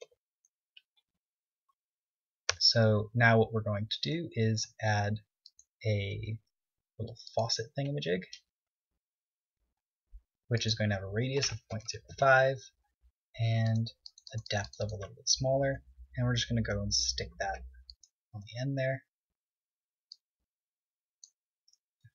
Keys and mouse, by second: 1.1 Tab, 2.3 z, 3.0 Tab, 4.9 shift+a, 8.7-11.0 middle drag, 9.3 KP_3, 11.0-12.6 drag, 14.1-17.2 drag, 16.3 g, 18.4 click, 18.8 KP_1.